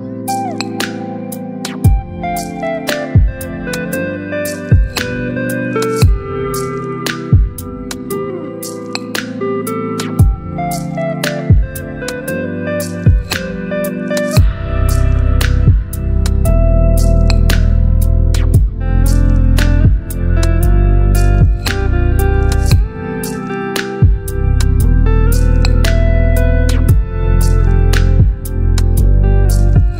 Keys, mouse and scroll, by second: 0.3 space, 0.4-1.4 click, 0.9 space, 6.7 shift+click, 7.8 alt+scroll down 1, 8.7 alt+scroll down 1, 16.6 click, 19.2 click, 21.3 alt+BackSpace, 22.7 ctrl+d, 24.4 ctrl+0, 26.6 click, 26.6 click.